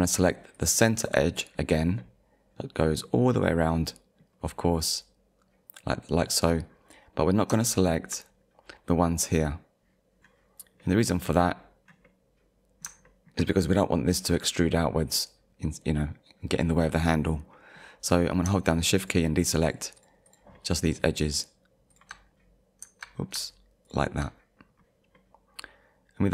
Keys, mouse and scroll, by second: 0.5 alt+click, 1.5 scroll down 1, 2.0 middle click, 3.3-3.7 scroll up 1, 3.7 middle click, 4.3-4.7 scroll down 1, 4.8 middle click, 7.2-7.6 scroll up 2, 8.4-8.8 scroll up 1, 9.8 click, 10.8 middle click, 11.3 scroll down 1, 12.1 middle click, 13.1 shift+middle click, 15.7 middle click, 17.5 middle click, 18.1 scroll up 1, 19.0 shift+click, 19.7 shift+click, 20.3 shift+click, 20.6 shift+middle click, 21.4 shift+click, 21.9 shift+click, 22.3-22.7 scroll up 1, 23.1-23.4 scroll down 2, 23.9 shift+click, 24.6 click, 24.6 scroll down 1, 24.9 click, 25.2 middle click.